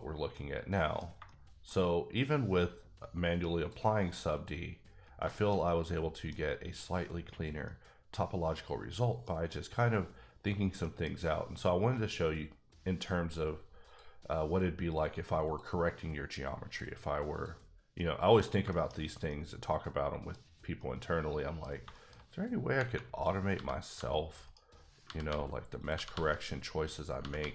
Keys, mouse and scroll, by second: 0.3 middle click, 1.0 scroll down 2, 1.2 shift+scroll up 1, 1.3 shift+middle click, 3.6 click, 4.3 click, 5.0 scroll down 2, 5.3 shift+middle click, 6.4 scroll up 1, 7.6 middle click, 9.3 middle click, 10.8 middle click, 14.8 click, 15.4 click, 17.3 click, 17.9 middle click, 18.6 shift+middle click, 18.9-19.3 scroll up 2, 19.3 middle click, 19.9 scroll down 1, 20.8 middle click, 21.6 scroll down 2, 21.9 shift+middle click, 22.1-22.6 shift+scroll up 5, 22.8 Tab, 23.1 click, 23.5 g, 23.9 g, 24.4 right click, 25.0 g, 25.2 g, 25.8 click, 25.9 g, 26.1 g, 26.8 click, 27.2 g, 27.4 g.